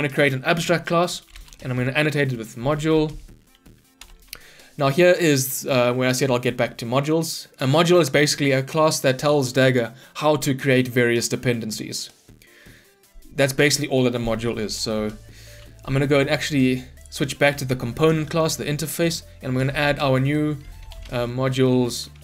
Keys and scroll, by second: 4.1 Return.